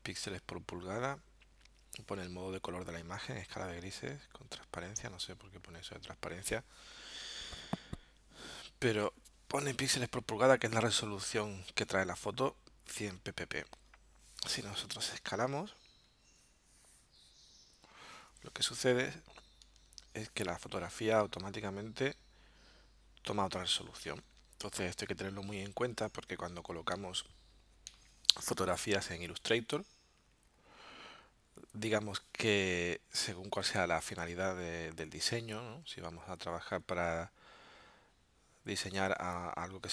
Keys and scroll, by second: 13.9 alt+super+-, 19.6 alt+super+0.